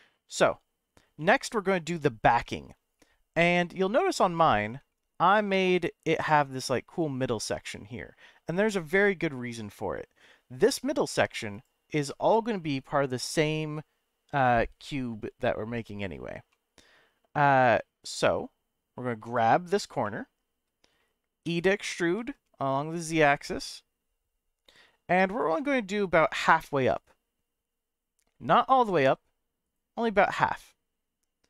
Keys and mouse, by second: 1.2 3, 2.5 shift+middle click, 3.0 middle click, 4.3 middle click, 4.9 shift+middle click, 11.5 click, 16.5-17.5 shift+middle drag, 20.0 middle click, 21.4 e, 22.2 z, 25.3 click, 25.5-28.5 middle drag, 28.8 g, 29.0 z, 29.6 right click, 30.3-31.4 middle drag.